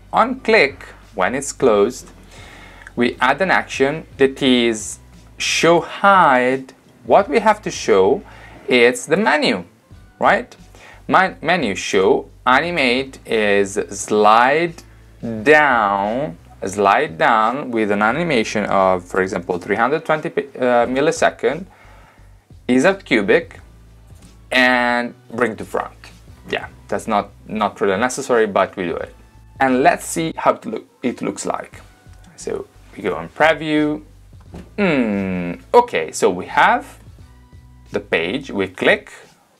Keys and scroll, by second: 19.3 3, 19.7 0.